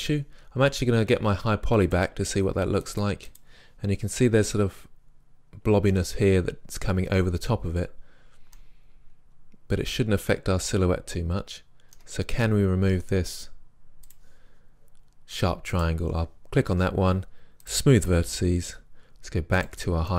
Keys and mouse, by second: 1.9-5.1 drag, 10.3 right click, 10.4 middle click, 14.2-17.5 right drag, 17.7-19.5 drag, 19.6-20.1 drag.